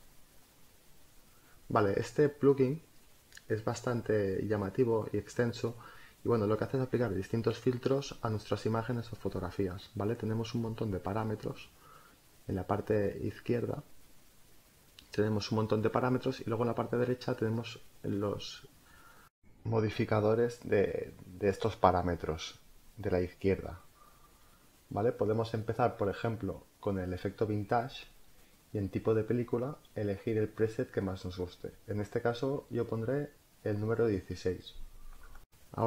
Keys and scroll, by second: 11.9 space.